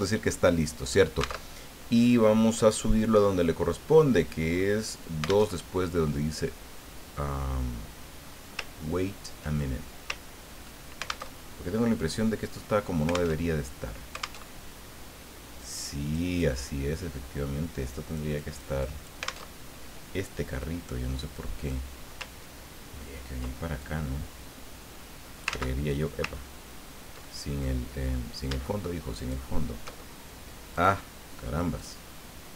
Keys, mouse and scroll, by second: 0.5 middle click, 1.5 alt+Tab, 2.4-3.4 scroll down 4, 4.1 click, 5.5 alt+Tab, 7.7-8.1 scroll down 2, 8.2-8.6 scroll up 2, 8.7 ctrl+scroll down 2, 9.7 ctrl+click, 10.2 ctrl+scroll up 2, 11.3 alt+Tab, 13.3 alt+Tab, 14.4 alt+Tab, 15.6 click, 16.5-18.3 drag, 18.4 click, 18.8 click, 19.5 alt+Tab, 20.6-21.9 drag, 23.8-25.6 ctrl+drag, 25.5 ctrl+z, 26.4-27.3 ctrl+scroll up 4, 27.3 ctrl+click, 29.2 shift+click, 30.7 click, 31.8 click.